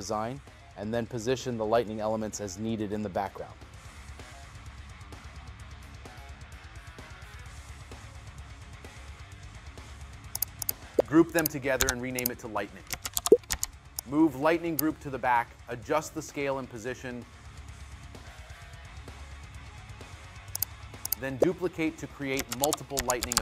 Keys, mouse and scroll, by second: 20.4 right click.